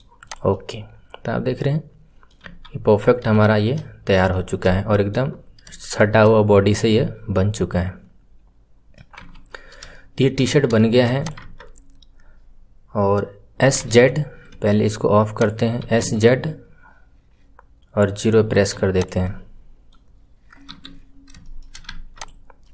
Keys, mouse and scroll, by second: 0.2 click, 0.4-2.4 middle drag, 2.4 KP_1, 3.3-5.3 shift+middle drag, 5.3-5.7 scroll up 1, 5.7-9.1 shift+middle drag, 9.1 KP_1, 9.5 scroll down 2, 9.9-11.1 shift+middle drag, 11.1 click, 15.3 click, 19.2-20.6 middle drag, 20.6 KP_3, 21.0 scroll up 4, 21.3-21.8 shift+middle drag, 21.8 Tab, 22.1 click, 22.6-22.7 middle drag.